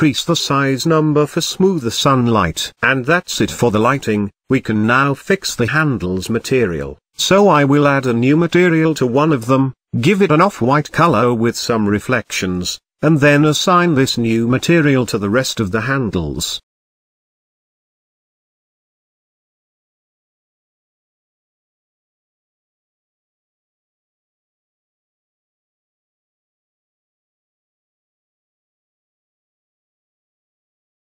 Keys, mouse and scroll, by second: 5.6 click, 9.1 z, 9.8 middle click, 10.1 scroll up 1, 10.3 z, 11.1 shift+middle drag, 11.3-12.0 scroll up 1, 12.0 click, 12.6 g, 13.7 click, 14.4-15.8 drag, 17.7-19.5 scroll down 5, 19.5-21.1 drag, 21.1-21.7 scroll up 3, 21.7-23.5 drag, 25.3 click, 26.4 shift+l, 28.5 shift+click, 29.4 ctrl+l, 31.0-31.1 scroll down 4.